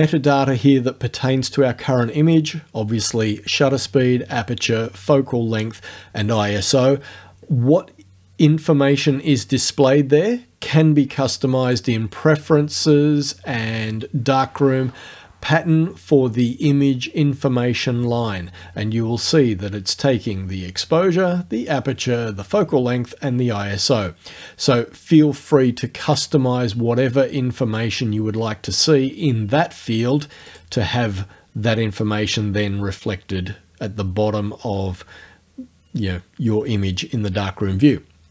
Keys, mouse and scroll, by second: 11.7 click, 30.5 click.